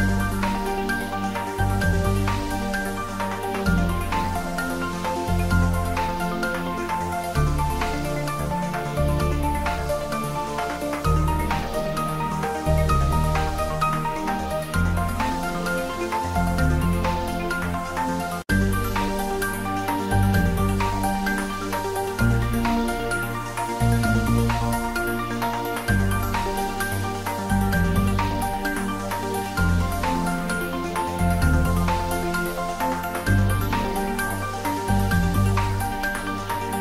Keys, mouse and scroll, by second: 0.7-1.2 scroll down 1, 1.2 middle click, 1.6 scroll down 1, 1.8 middle click, 2.5 scroll up 1, 2.9 scroll down 1, 3.1-4.6 middle drag, 5.5 click, 8.7-9.0 scroll up 1, 9.9 `, 10.2 `, 10.7 scroll down 1, 11.0 middle click, 11.5-12.2 scroll up 1, 13.5 click, 14.4-15.3 scroll down 1, 18.6-19.9 middle drag, 19.9 click, 21.1 Tab, 21.9 middle click, 22.5 click, 25.1 click, 26.8 click, 27.7 Tab, 28.4 click, 30.6 click, 32.0-32.7 scroll up 1, 33.3-34.2 scroll down 1, 34.6 click, 35.2 scroll down 1, 35.7-36.8 middle drag.